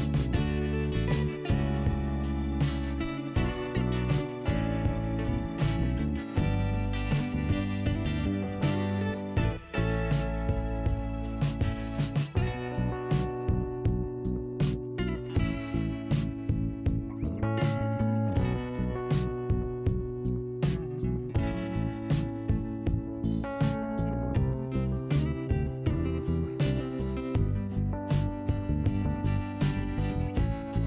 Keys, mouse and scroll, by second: 0.5 scroll down 1, 1.3 click, 2.6 l, 4.0 click, 5.9 scroll up 1, 8.2 click, 8.9 click, 9.9 l, 10.9 scroll up 2, 12.1 scroll down 1, 12.2 scroll up 1, 12.3 scroll down 1, 12.7 click, 12.8 scroll down 1, 13.0 click, 14.9 click, 16.1 click, 19.6 scroll up 1, 21.8 click, 23.1 click, 24.6 click, 24.7 click, 25.5 click, 27.1 scroll up 1, 29.8 scroll up 2.